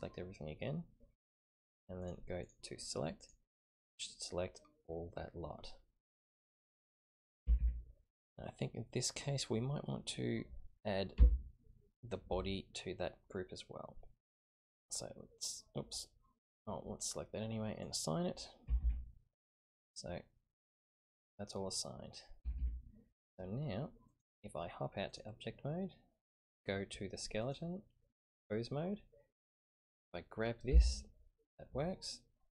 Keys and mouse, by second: 2.0 click, 2.4 click, 3.2 click, 7.4 a, 7.6 a, 11.2 l, 14.8 click, 17.8 click, 18.6 a, 18.8 a, 20.8 click, 22.6 a, 24.1-25.2 drag, 26.3 click, 27.4-28.3 drag, 29.7 click, 30.7 g.